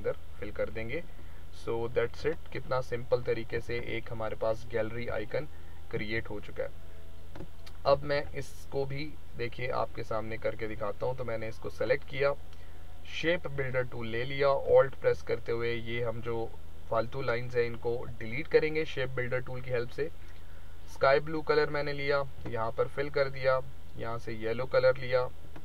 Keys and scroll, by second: 3.5 ctrl+-, 5.1 ctrl+-, 5.6 ctrl+-, 6.1 space, 8.1 ctrl+=.